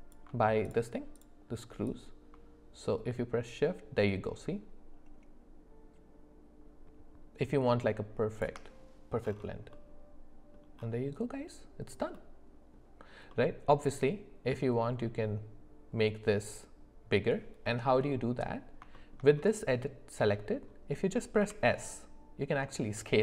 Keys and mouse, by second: 1.9-8.4 drag, 9.7 middle click, 12.1 middle click, 13.3-14.5 middle drag, 17.7 middle click, 18.9 shift+middle click, 20.3 middle click, 21.4 s.